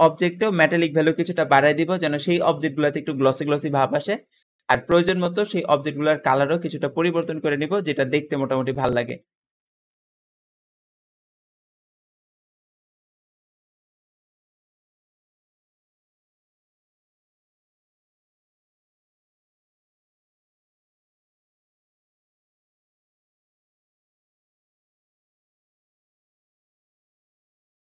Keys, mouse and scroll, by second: 10.1 click, 10.2 click, 10.7 scroll up 2, 10.8 click, 10.9 Return, 10.9 1, 11.1 middle click, 11.4 click, 11.5 middle click, 11.5 scroll up 11, 11.6 scroll down 10, 11.7 scroll up 1, 12.2 scroll down 1, 12.2 click, 12.5 click, 13.0 scroll up 5, 13.1-13.6 scroll down 4, 13.6 click, 13.7 middle click, 13.8 scroll up 5, 13.9 scroll down 2, 14.4 middle click, 14.6 click, 14.6 KP_Decimal, 14.7 middle click, 15.0 ctrl+z, 15.1 scroll down 2, 15.2 click, 15.5 middle click, 15.7 click, 15.8 middle click, 15.9 middle click, 16.1 click, 16.5 middle click, 16.6 scroll up 6, 16.8 scroll down 3, 16.8 scroll up 1, 16.9-17.4 scroll down 2, 17.0 click, 17.3 click, 17.4-20.3 typing, 17.6 scroll up 3, 17.9 click, 18.2 middle click, 18.4 click, 18.6 click, 19.0 click, 19.3 scroll up 6, 19.4-19.7 scroll down 12, 19.5 click, 19.7 middle click, 19.9 scroll up 1, 20.0 scroll down 3, 20.0 click, 20.2 middle click, 20.6 click, 21.3 scroll up 1, 21.9 scroll down 6, 22.1 click, 22.3 middle click, 22.6 scroll up 4, 22.7 middle click, 22.8 click, 23.3 click, 23.4 click, 23.9 click, 24.2 middle click, 24.3 ctrl+z, 24.3 ctrl+z, 24.5 ctrl+middle click, 24.7 KP_0, 24.8 click, 24.9 click, 25.3 scroll down 5, 25.5 click, 25.6 scroll up 2, 25.9 click, 25.9 scroll down 3, 26.1 click, 26.5 click, 26.6 scroll up 1, 26.7 scroll down 2, 26.8 click, 27.1 click, 27.5 scroll up 7.